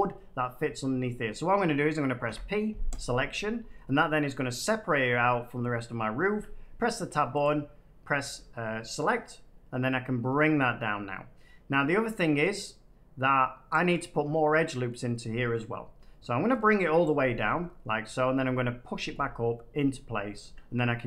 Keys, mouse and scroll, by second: 2.2 p, 2.9 click, 6.2 Tab, 7.3 click, 13.6 click, 14.8 middle click, 17.0 click, 17.4 shift+middle click, 17.9 middle click, 20.3 Tab.